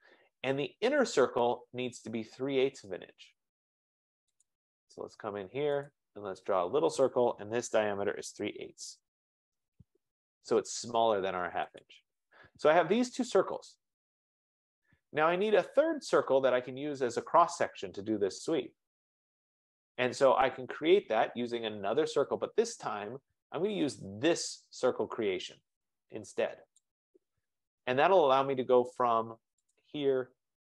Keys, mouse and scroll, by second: 0.9-2.2 scroll, 4.6 click, 6.0 click, 7.8-9.8 typing, 10.9 scroll, 11.8 click, 12.2 3, 13.6 click, 15.8 click, 26.9 click, 30.1 click.